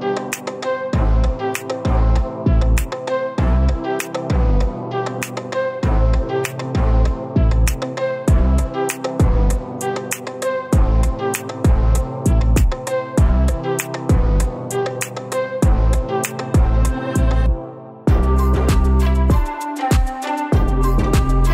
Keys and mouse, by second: 3.0-3.9 drag, 6.4 click, 8.5 g, 12.7 click, 14.8 click, 15.0 g, 17.3-18.1 drag, 18.8 g.